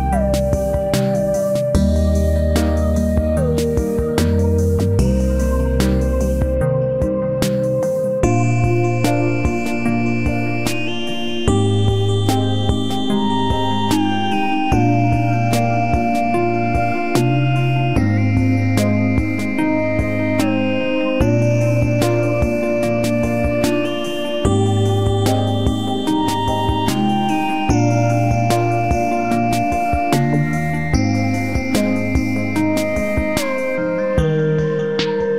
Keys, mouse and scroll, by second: 1.4-3.2 right drag, 1.7 b, 2.1 g, 5.2 ctrl+s, 8.1 ctrl+r, 10.0 ctrl+r, 11.6 middle click, 12.1-13.5 drag, 12.9 c, 13.5-15.4 right drag, 14.3-16.0 drag, 18.0 ctrl+r, 21.0-22.7 right drag, 21.2 g, 24.2-25.5 right drag, 24.4 b, 24.8 g, 25.5 click, 28.2-29.2 middle drag, 29.2 ctrl+r, 32.3 right click, 32.9 KP_Decimal, 33.0 right click, 34.3 g.